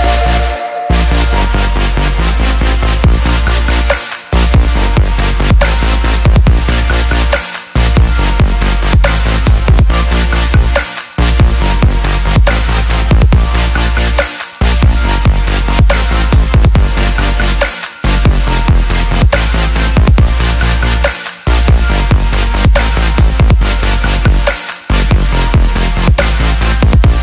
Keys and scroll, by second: 19.4 ctrl+t.